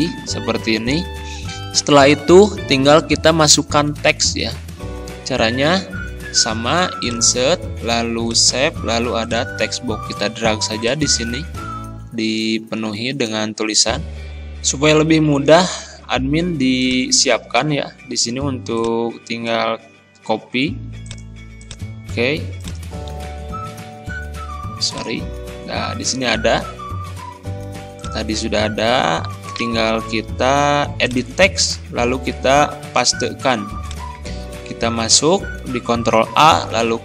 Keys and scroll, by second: 20.2 ctrl+c, 23.2 ctrl+z, 32.8 ctrl+v, 34.8 ctrl+a, 36.8 ctrl+e.